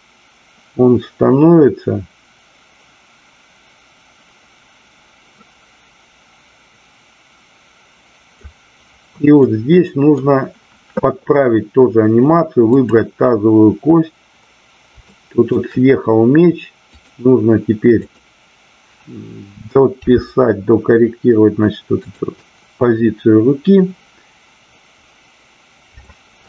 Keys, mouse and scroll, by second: 9.3 middle click, 12.6-13.6 drag, 15.0-15.3 shift+middle drag, 16.9 click, 18.0 click, 22.1 click, 22.4-26.0 middle drag.